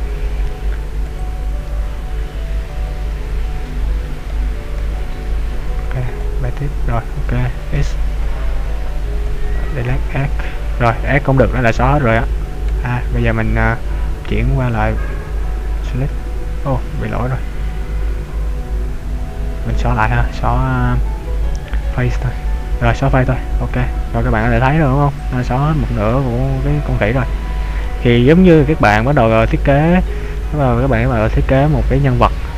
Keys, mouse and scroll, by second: 0.6 shift+click, 1.7 shift+b, 5.6 b, 7.7 x, 12.7 a, 14.5 click, 17.5 ctrl+z, 17.9 ctrl+z, 20.2 x, 26.1 middle click, 28.2 middle click, 28.2-28.8 scroll up 1, 29.9 KP_5, 30.3 middle click, 31.2 scroll down 2, 31.6 middle click.